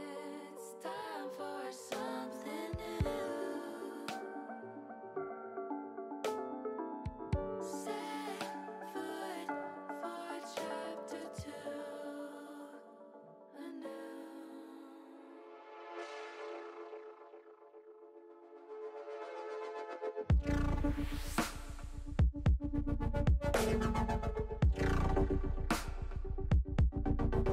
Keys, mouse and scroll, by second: 0.3 ctrl+z, 0.7 middle click, 0.8 middle click, 1.3 middle click, 3.8 click, 6.0 click, 7.0-8.2 drag, 8.7 click, 10.4 click, 13.4-14.5 drag, 15.2 click, 16.5 middle click, 16.6 middle click, 18.2-20.1 drag, 20.4 middle click, 21.1-22.2 middle drag, 25.3 click, 26.2 ctrl+z.